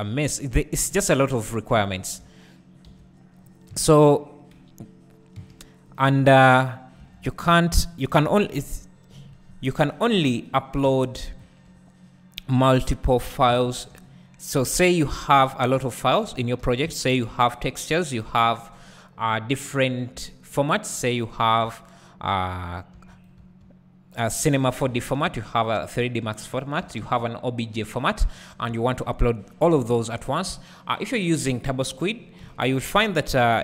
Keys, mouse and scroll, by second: 2.9 2, 3.5 click, 5.9 x, 7.0 1, 7.5 alt+click, 8.1 KP_1, 9.1 KP_Decimal, 10.8 e, 11.4 s, 13.2 click, 13.5 s, 15.1 click, 15.6-16.6 scroll down 1, 16.6 e, 20.2 `, 22.9 e, 23.2 right click, 23.4 s, 26.6 click, 26.8 e, 28.0 click, 28.3-28.7 scroll down 1, 29.1-30.1 scroll down 1, 32.0 click, 32.4 KP_3, 33.4 KP_1.